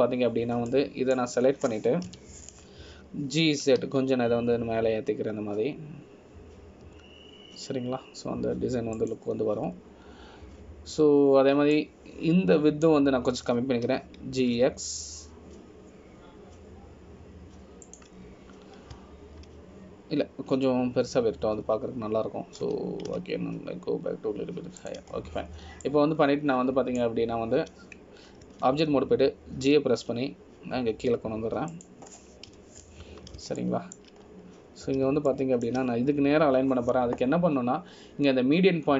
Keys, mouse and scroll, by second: 1.3 click, 4.2 KP_Decimal, 5.7 g, 11.7 scroll down 2, 12.4-13.9 scroll down 2, 13.9 click, 16.0 g, 20.7 scroll down 1, 23.2-23.7 scroll up 2, 24.8-26.8 scroll up 1, 24.8 g, 27.3-27.8 scroll down 1, 28.0 click, 28.0-28.4 scroll down 1, 30.6 Tab, 31.8 g, 34.7 KP_Decimal, 35.8 shift+middle click, 36.4-36.9 scroll up 3, 37.5 shift+middle click.